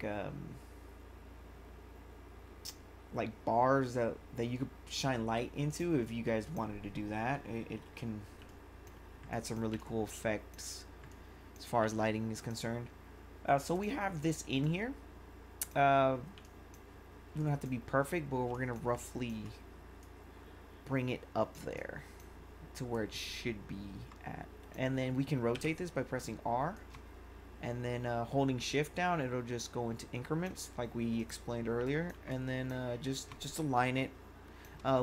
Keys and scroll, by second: 8.4 1, 17.3 1, 29.4 r, 31.8 1.